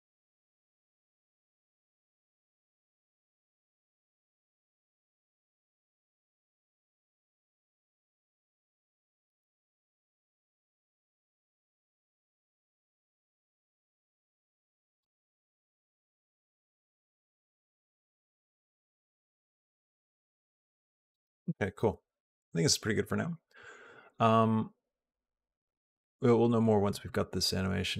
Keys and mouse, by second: 4.0 click, 14.8 space, 15.0 click, 21.0 space, 22.9 click, 24.4-27.9 drag.